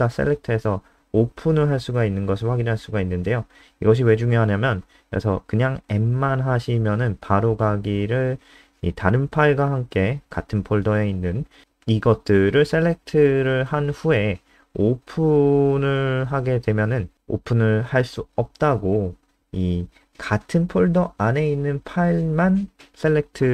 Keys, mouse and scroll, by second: 4.7 Right, 4.9 Right, 5.1 BackSpace, 5.3 BackSpace, 6.2 F5, 7.8 click.